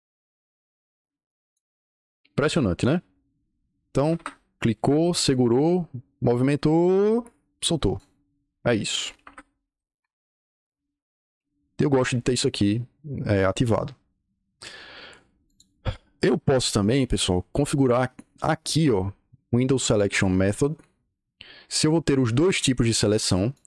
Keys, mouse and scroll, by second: 4.0 Escape, 4.9-7.9 drag, 9.1 Escape, 9.3-10.2 typing, 15.4 click, 16.5 click, 17.4 click, 23.3 click.